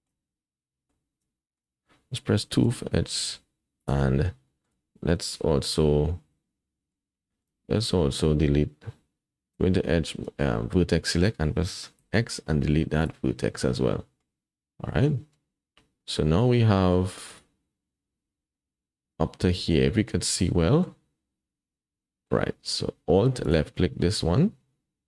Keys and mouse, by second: 0.3 middle click, 1.4 shift+click, 2.4 2, 3.8 alt+click, 4.5 shift+click, 4.6 shift+middle click, 4.6 typing, 6.8 middle click, 7.3 shift+middle click, 9.5 1, 10.4 middle click, 10.5 click, 10.6 middle click, 12.0 x, 13.7 middle click, 15.1-16.9 middle drag, 18.6-20.8 middle drag, 21.7 middle click, 23.4 alt+click, 24.0-25.0 drag.